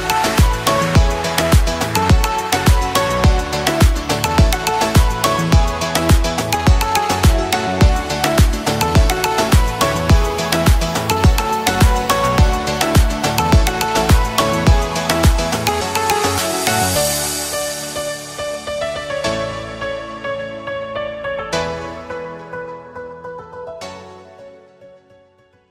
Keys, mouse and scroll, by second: 2.3 alt+scroll up 1, 2.9-4.5 drag, 7.6 space, 7.7 click, 8.2-8.6 alt+scroll up 1, 8.6-9.6 click, 9.6 alt+scroll down 1, 10.1 space, 10.6 alt+scroll up 1, 12.2-13.4 drag, 13.4 alt+scroll down 1, 14.4-15.1 click, 15.6 alt+scroll up 1, 16.0-17.3 drag, 17.9 space, 18.1-18.9 drag, 19.4 space, 19.5 click, 19.6 space, 19.8-20.3 drag, 21.3 alt+scroll down 1, 21.5-21.9 click, 21.9 space, 22.0-22.3 click, 22.2 space, 22.5 alt+scroll up 1, 22.7 space, 22.8-23.1 click, 22.9 space, 23.4-23.9 click, 23.9 alt+scroll down 1, 24.2 click, 24.4 space, 25.2 alt+scroll up 1, 25.6-25.7 click.